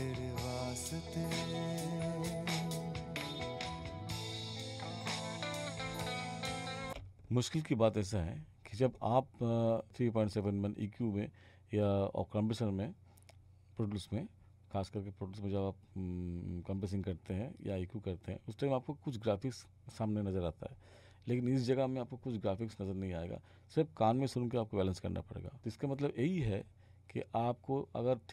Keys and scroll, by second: 6.9 space.